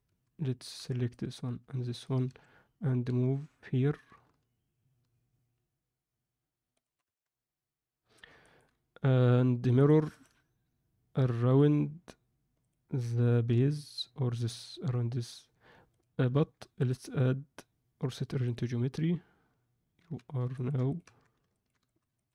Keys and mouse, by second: 0.7 alt+a, 0.7 c, 3.0 g, 7.0 Tab, 8.4 ctrl+middle click, 9.7 drag, 10.1-11.5 drag, 15.8 click, 16.7-18.5 right drag, 19.9 z, 20.5 ctrl+middle click, 21.0 Tab, 21.5 ctrl+middle click, 21.8 alt+shift+middle click, 22.1 ctrl+alt+middle click.